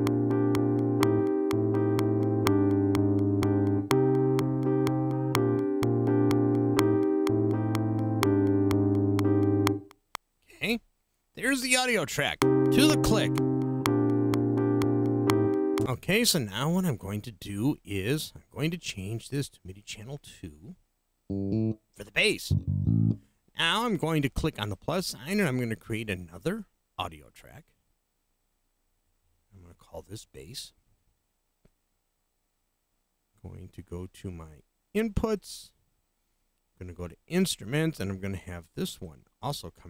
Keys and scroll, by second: 10.3 space, 12.2 space, 15.8 space, 28.7-29.7 typing.